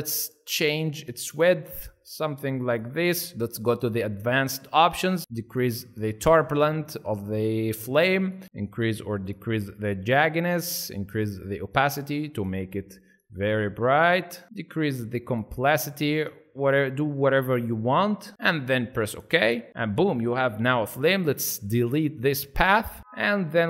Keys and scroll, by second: 22.7 Delete.